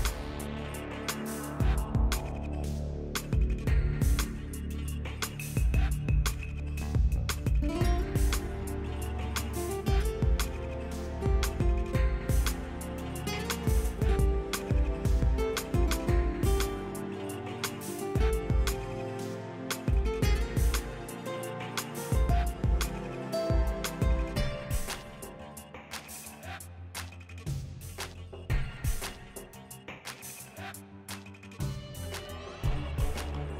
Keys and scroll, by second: 14.9-16.0 typing, 19.2-20.2 typing, 25.8 m, 29.2-31.0 typing.